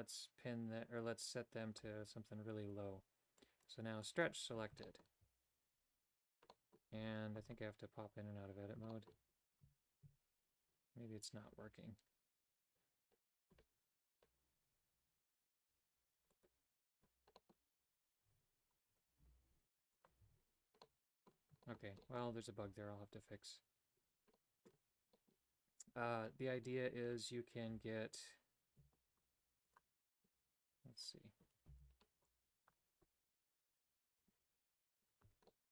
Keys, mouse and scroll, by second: 3.4 click, 4.0 click, 4.8 shift+middle click, 5.2 a, 6.5 middle click, 7.0 Tab, 7.4 Tab, 8.9 shift+middle click, 10.1 Tab, 16.3 click, 17.4 middle click, 17.8 Tab, 18.3 Tab, 18.9 right click, 19.3 g, 20.3 a, 20.9 middle click, 21.7 shift+middle click, 22.1 middle click, 24.4 middle click, 25.2 middle click, 29.7 click, 31.7 c, 35.3 Tab, 35.5 middle click.